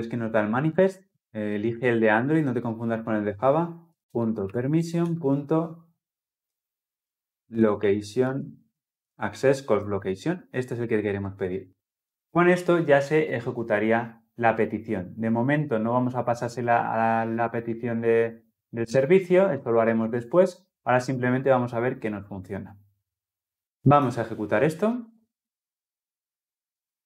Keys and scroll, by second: 3.2 Return, 10.7 Return, 23.8 shift+F10.